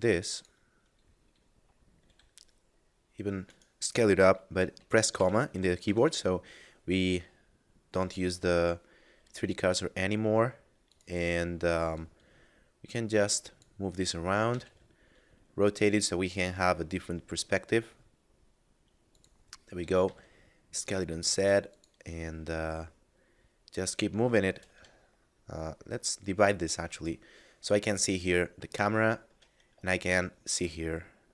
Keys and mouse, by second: 0.3 click, 2.0 s, 3.5 right click, 5.7 s, 8.0 click, 8.4 s, 10.7 click, 14.5 r, 14.6 z, 19.1 click, 19.7 s, 21.7 click, 24.5 shift+space, 26.3 click, 27.4 middle click, 28.1 ctrl+middle click, 29.7 middle click, 30.0 shift+middle click.